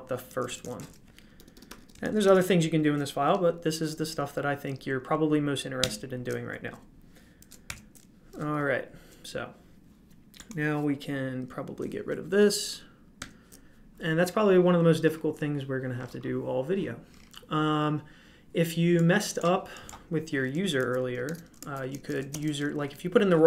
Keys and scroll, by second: 0.3-0.7 typing, 1.3 Escape, 1.5 Escape, 1.6 Escape, 1.7-2.7 typing, 7.6 ctrl+l.